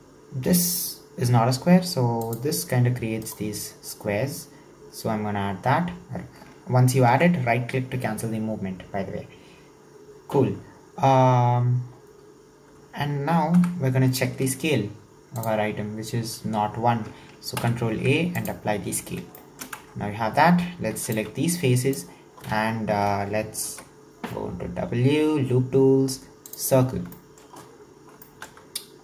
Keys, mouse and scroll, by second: 11.3-12.1 scroll down 1, 12.1-12.6 scroll up 1, 13.6 Tab, 15.4 drag, 17.6 ctrl+a, 19.4 shift+middle click, 19.8 Tab, 20.9 3, 21.2 click, 23.7 w, 27.0 scroll down 2, 27.1-27.8 shift+middle drag, 27.8-28.3 scroll up 2, 28.3 shift+middle click.